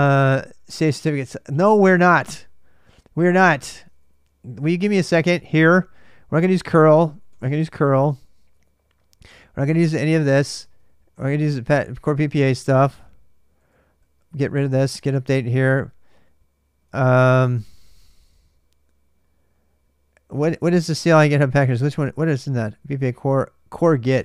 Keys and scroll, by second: 1.4 ctrl+[, 1.5 typing, 3.7 ctrl+[, 4.0 typing, 5.2-9.9 typing, 7.8 ctrl+[, 16.7 ctrl+[, 16.8 u, 17.3 ctrl+[, 17.5 u, 19.6 typing, 23.9-24.2 typing.